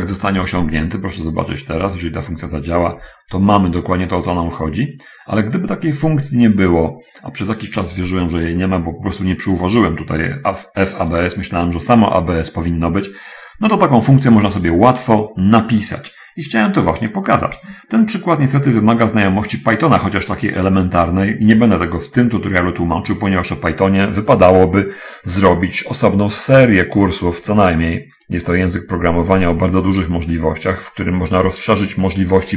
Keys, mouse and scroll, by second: 0.0 Return, 1.8 click, 2.9-14.4 drag, 15.0 click, 18.3-19.8 ctrl+drag, 22.5-24.0 drag, 28.7-30.1 drag.